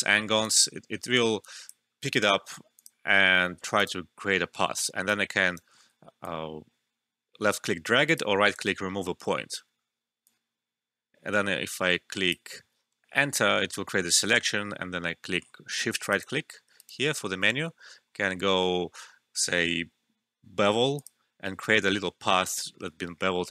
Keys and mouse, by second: 0.4 click, 5.0 right click, 5.8 ctrl+z, 6.2-8.4 drag, 8.4 right click, 9.3 alt+middle click, 10.2-12.8 drag, 12.8 Return, 15.9 Return, 16.0 shift+right click, 16.7 shift+right click, 20.9 click, 20.9 typing.